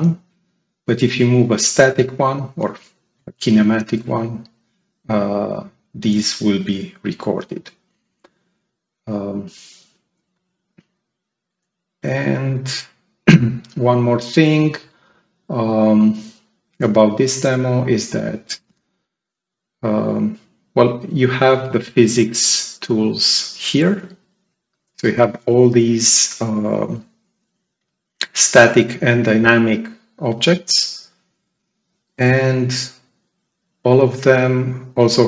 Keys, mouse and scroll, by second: 1.0-2.3 drag, 6.3 click, 6.8 click, 12.0 click, 17.1 click, 20.7 right click, 22.1 click.